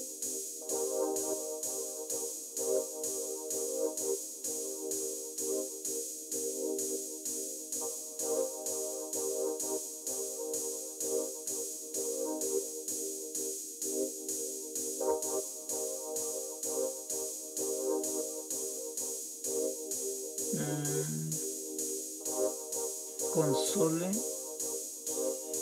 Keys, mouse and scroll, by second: 0.4 Up, 2.5 Down, 2.9 Down, 3.6 Up, 4.0 Up, 4.6 Up, 8.4 Home, 8.5-11.2 Up.